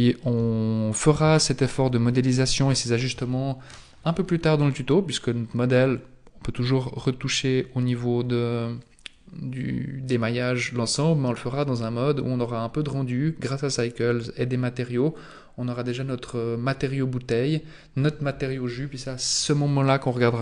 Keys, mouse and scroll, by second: 1.5 shift+middle click, 2.1-2.7 scroll down 2, 2.9 scroll up 1.